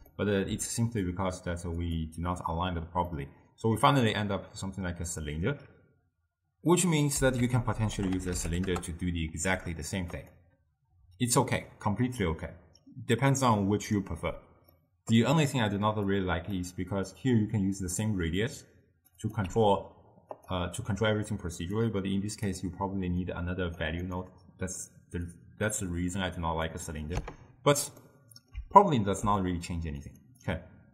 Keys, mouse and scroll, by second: 1.9-3.2 drag, 3.2-6.3 middle drag, 7.5 ctrl+a, 14.8-16.2 middle drag, 16.2-20.6 drag, 21.9-23.5 drag, 25.4 click, 27.2 x, 28.1-30.2 middle drag, 30.2 click, 30.5 click.